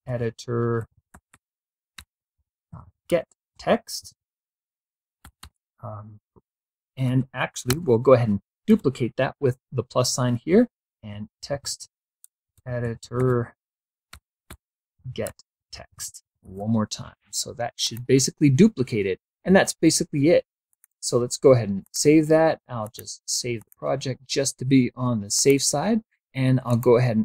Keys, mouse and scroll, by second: 0.0-5.6 typing, 6.7 space, 7.3 shift+=, 8.3 space, 10.5-16.6 typing, 17.5 click, 20.3 click, 21.5 click, 22.5 click, 23.2 click, 25.0 click, 26.3 click.